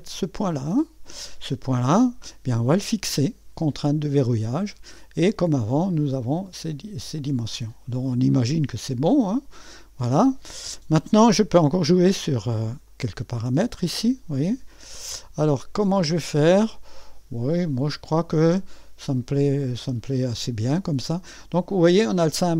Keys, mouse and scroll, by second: 0.0 click, 4.1 click, 6.0-7.3 drag, 12.9-19.8 drag.